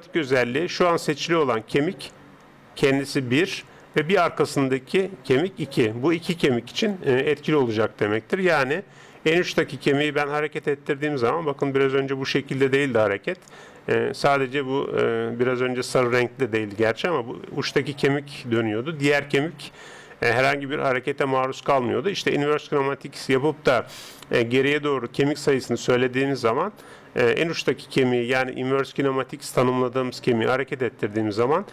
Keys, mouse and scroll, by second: 4.7-9.2 right drag, 9.3 g.